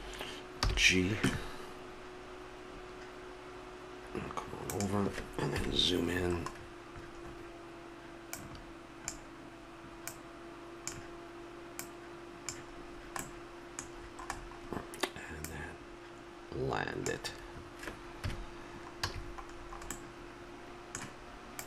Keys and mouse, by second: 0.6 g, 5.5 KP_Decimal, 8.4-13.6 drag, 13.6-14.7 middle drag, 15.2 middle click, 15.4-17.3 drag, 18.2 KP_Decimal, 19.0 a.